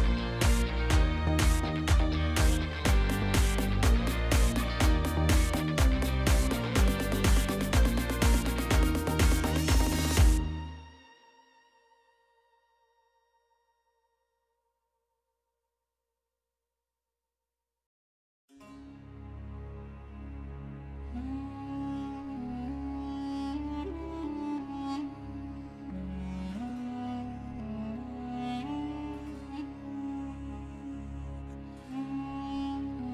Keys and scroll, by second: 2.2 g, 2.6 y, 10.7 0, 10.9 Return, 12.8 1, 13.0 Return, 15.7 1, 15.9 ., 16.1 5, 16.3 Return, 17.9 ., 18.1 3, 18.3 Return, 22.9 1, 23.5 Return, 28.9 1, 29.4 Return.